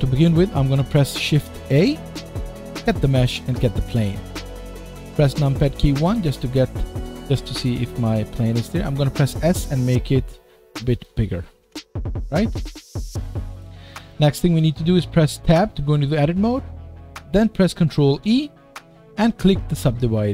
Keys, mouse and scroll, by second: 1.6 shift+a, 5.0 KP_1, 5.9-10.9 middle drag, 9.2 s, 11.1-20.3 middle drag, 11.7 KP_1, 15.5 Tab, 18.1 ctrl+e.